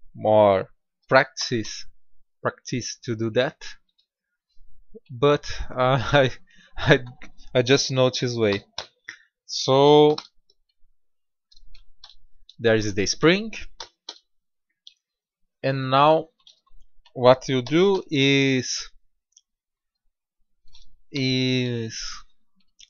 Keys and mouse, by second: 1.2 s, 8.4 r, 12.0 KP_7, 13.7 g, 17.5 g, 19.9-20.7 middle drag, 21.0 KP_7.